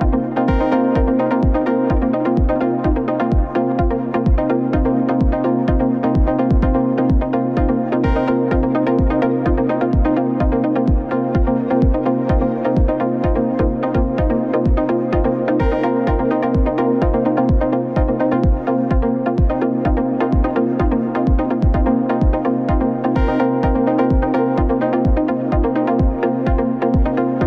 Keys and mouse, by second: 1.2-6.0 middle drag, 7.0 middle click, 8.5-9.6 middle drag, 9.9 click, 11.0 click, 12.2 alt+shift+click, 13.4 click, 14.7 shift+click, 21.5 Escape, 22.9-27.4 right drag.